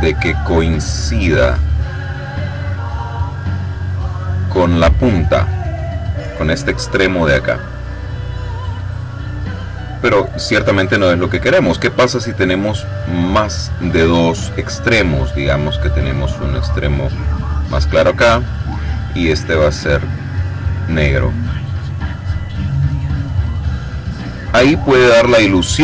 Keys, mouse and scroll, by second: 7.6-12.1 drag, 12.2 click, 15.7-17.6 drag, 18.2 click, 19.0 click, 21.6-24.8 drag.